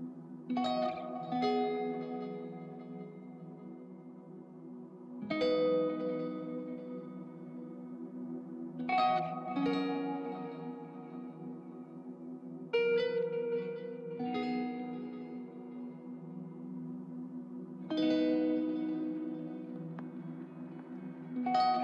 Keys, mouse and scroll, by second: 11.7 alt+middle click, 15.2 c.